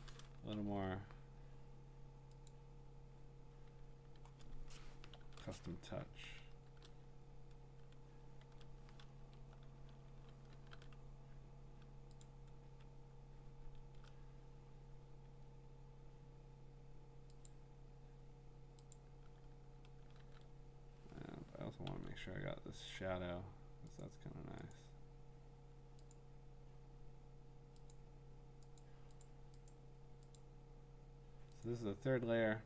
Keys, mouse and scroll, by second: 0.6 ctrl+z, 2.5 click, 5.2 ctrl+shift+i, 6.6 BackSpace, 8.4 ctrl+z, 9.2 alt+BackSpace, 10.7 ctrl+d, 12.2-14.6 ctrl+drag, 17.5 click, 18.9 click, 20.2 ctrl+d, 22.9 click, 24.0 click, 24.7 click, 26.1 click, 27.9 click, 28.8 click, 29.3 click, 29.7 click, 30.4 click, 31.6 click, 32.0 click.